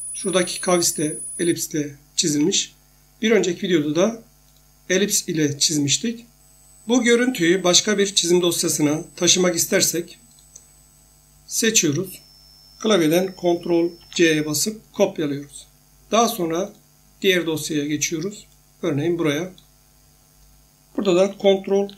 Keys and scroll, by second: 2.3 Escape, 14.0 ctrl+c.